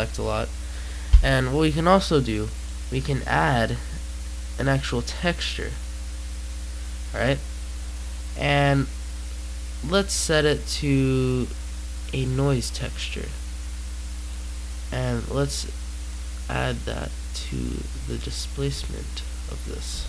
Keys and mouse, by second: 0.0 Escape, 1.1-3.5 right drag, 3.5-4.9 drag, 4.9 middle click, 5.7-11.7 drag, 14.0 click, 14.6 click, 15.5-19.4 drag.